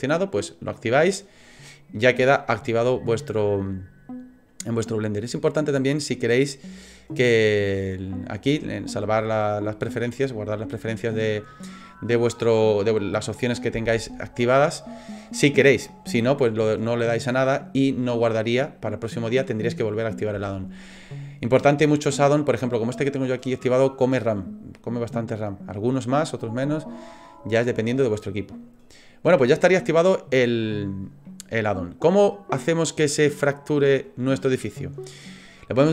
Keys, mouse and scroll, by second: 31.3 middle click.